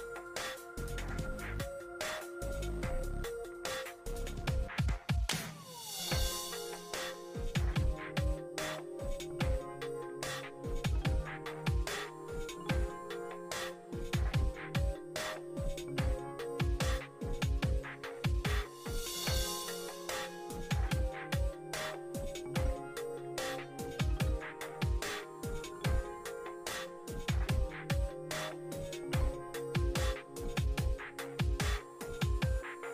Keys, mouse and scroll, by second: 0.2-9.3 drag, 11.7 e, 14.2-17.1 drag, 17.1 5, 19.5 \, 21.5-23.0 middle drag, 23.0-24.3 drag, 24.3 ctrl+z, 25.1-31.1 drag, 31.1-32.9 middle drag.